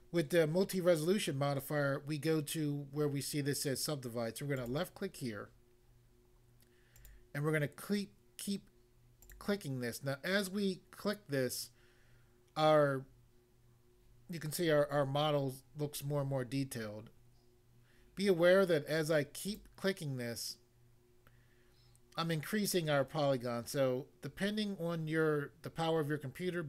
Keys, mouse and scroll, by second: 4.5 click, 4.6 click, 6.9 click, 7.0 click, 9.3 click, 9.3 click, 19.5 click.